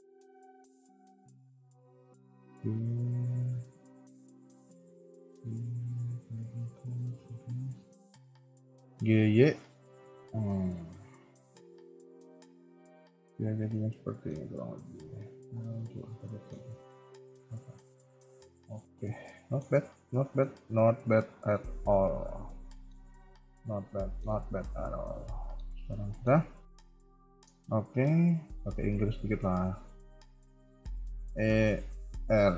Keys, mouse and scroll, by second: 0.9 KP_1, 1.5 click, 1.7 KP_3, 2.2 g, 4.6 click, 4.9 g, 7.1 KP_1, 7.8 click, 8.0 KP_3, 8.8 g, 10.4-10.8 scroll down 1, 10.8 KP_1, 11.1 scroll down 3, 11.3 Tab, 11.6 KP_3, 12.4 KP_1, 13.0 middle click, 14.4 KP_3, 14.6 KP_1, 15.6 click, 15.9 middle click, 16.5 KP_1, 16.6 scroll up 1, 16.8 middle click, 19.7 KP_1, 19.9 scroll down 2, 20.2 shift+middle click, 20.4-22.2 shift+scroll up 5, 22.2 click, 22.7 shift+middle click, 22.9 scroll up 1, 23.2 middle click, 24.4 KP_1, 24.9 click, 25.4 shift+middle click, 25.7 middle click, 26.3 KP_1, 26.7 scroll down 3, 27.1 shift+middle click, 27.4 Tab, 28.0 z, 29.0 a, 29.3 a, 29.4 b, 30.6-31.0 scroll up 1, 31.1 r.